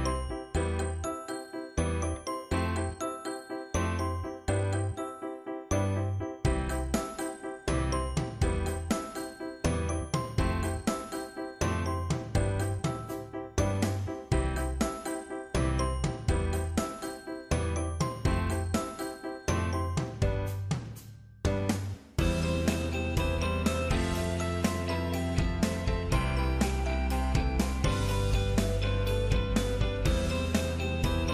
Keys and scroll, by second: 14.1 ctrl+z.